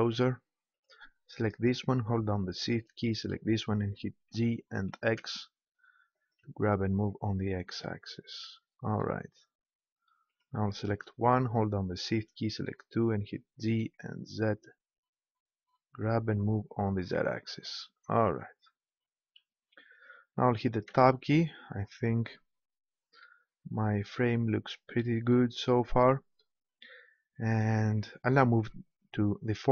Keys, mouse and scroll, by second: 0.7-2.6 right drag, 2.8-4.5 right drag, 4.2 g, 6.2-8.2 drag, 10.3-13.4 middle drag, 13.4 g, 16.9-18.7 drag, 20.9 Tab.